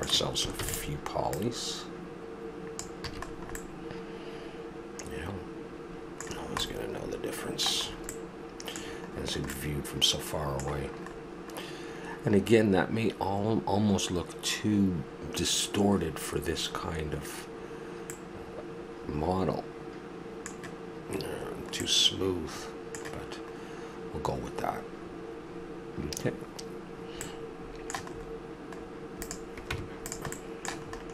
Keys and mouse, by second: 0.5 shift+d, 1.3 drag, 3.1 a, 3.3 middle drag, 3.6-4.2 middle drag, 4.2 middle drag, 6.3-6.7 middle drag, 7.0 middle drag, 7.4-8.3 middle drag, 8.5-10.4 middle drag, 12.1 middle click, 13.0-14.8 middle drag, 16.8-18.6 middle drag, 18.8 middle click, 21.3-22.6 middle drag, 25.0-27.7 middle drag, 28.1-29.2 middle drag, 29.2-29.7 right drag, 29.7 Tab, 30.3-31.1 middle drag.